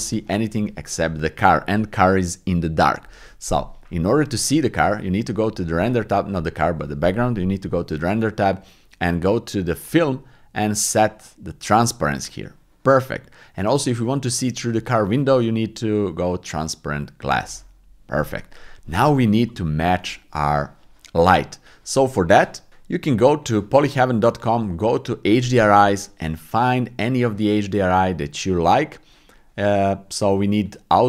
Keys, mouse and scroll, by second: 4.9 click, 9.8 click, 11.6 click, 13.5 middle click, 14.3 shift+middle click, 17.2 click, 18.4 middle click.